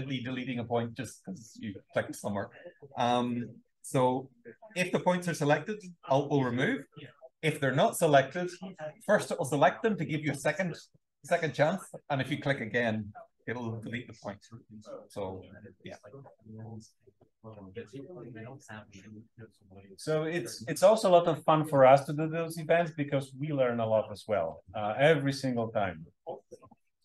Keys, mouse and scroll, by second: 2.8-4.3 alt+scroll down 1, 4.3-5.2 alt+scroll down 1, 5.9 alt+click, 8.5 alt+click, 13.4 alt+click, 14.4-17.9 scroll down 1, 17.9-18.5 scroll down 1, 18.5-27.0 scroll down 1.